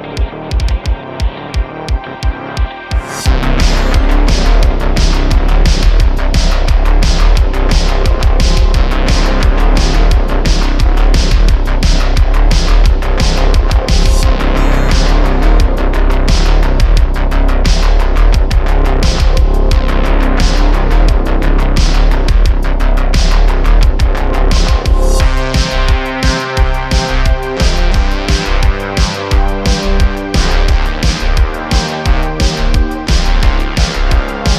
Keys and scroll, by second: 0.1 x, 2.3 3, 2.9 Tab, 3.3 3, 4.9 Tab, 5.4 Tab, 7.8 Tab, 15.6 s, 18.0 shift+a, 19.1 s, 22.8 s, 23.7 `, 31.5 q.